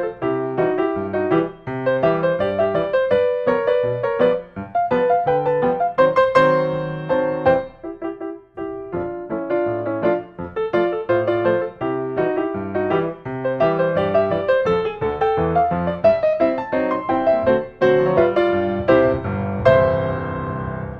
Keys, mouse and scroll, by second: 3.3-4.9 middle drag, 3.3-4.9 scroll up 8, 4.9-5.9 scroll up 3, 5.9 scroll, 6.2-7.6 scroll up 4, 7.6 click, 8.0 scroll down 1, 8.1 scroll down 1, 8.1 scroll down 1, 8.2-8.5 scroll down 1, 8.5 scroll down 1, 8.6-9.3 scroll down 1, 11.0 scroll up 1, 11.2 scroll down 1, 11.2 scroll down 1, 11.4-11.7 scroll down 1, 11.6 scroll, 11.7-12.1 scroll down 1, 12.1-13.5 scroll down 1, 12.6-13.5 scroll, 13.5 right click, 13.7 click, 13.7 right click, 13.9-15.8 middle drag, 13.9-14.7 scroll down 6, 14.7-18.7 scroll up 22, 17.0-18.7 middle drag, 18.9-19.6 scroll.